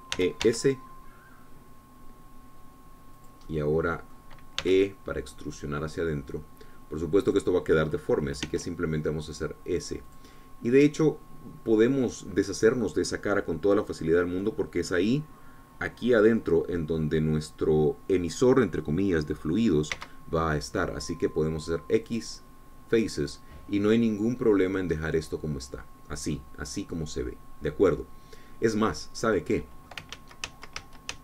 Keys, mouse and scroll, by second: 1.6 s, 4.3 click, 4.6 middle click, 6.0 e, 8.4 click, 9.6 s, 11.2 click, 11.5-21.1 middle drag, 21.1 x, 23.2 click, 24.2-25.9 middle drag, 26.1-28.7 drag, 28.7 scroll down 1, 29.1-30.1 drag, 30.4 click.